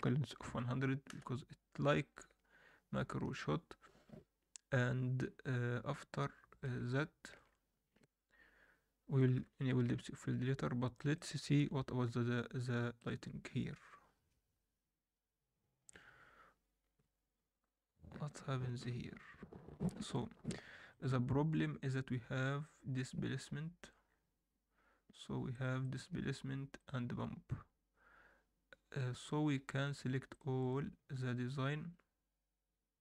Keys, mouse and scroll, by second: 0.4 0, 1.9-3.3 ctrl+alt+middle drag, 6.1 alt+middle click, 6.8 shift+middle click, 9.3 KP_7, 9.9 ctrl+s, 10.3 scroll down 2, 10.9 alt+middle drag, 11.6 KP_0, 12.1 ctrl+s, 15.4 click, 20.9-22.7 drag, 22.7-25.1 scroll down 5, 23.8 click, 25.1-27.0 drag, 25.1-25.6 scroll down 1, 29.6 scroll up 1, 30.3 click, 30.3 scroll up 1, 30.6-33.0 right drag.